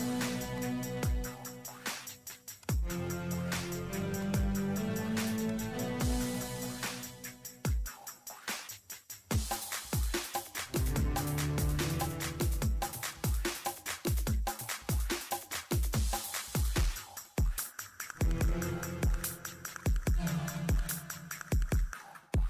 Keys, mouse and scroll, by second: 0.5 click, 1.5 ctrl+8, 1.7 ctrl+middle click, 2.0 scroll up 1, 2.3 click, 3.5-4.3 typing, 4.2 click, 4.3 middle click, 4.7 click, 5.7 middle click, 6.1 click, 6.5 middle click, 7.9 click, 8.1 middle click, 8.5 click, 8.8 middle click, 10.5 click, 11.4 ctrl+8, 11.6 scroll up 1, 11.8 ctrl+middle click, 12.0 scroll down 1, 12.2 ctrl+middle click, 12.3-12.7 scroll up 2, 12.5 ctrl+middle click, 12.8 ctrl+middle click, 13.1 click, 13.2 scroll down 1, 14.6 click, 17.0 Escape, 17.2 click, 17.6-18.5 typing, 18.5-18.9 scroll up 2, 18.7 ctrl+middle click, 19.4 ctrl+middle click, 19.8 click, 19.8-21.3 typing, 20.5 click, 21.1 click, 21.3 scroll up 1, 21.7 ctrl+middle click, 21.9 scroll down 1, 22.1 ctrl+middle click.